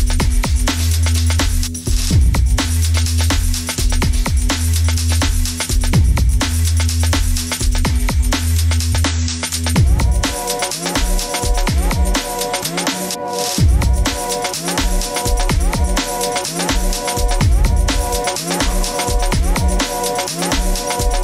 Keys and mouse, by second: 0.4-1.0 shift+middle drag, 1.3 ctrl+s, 2.0 middle click, 4.0-4.5 shift+middle drag, 14.6-17.6 middle drag, 19.1-21.2 middle drag.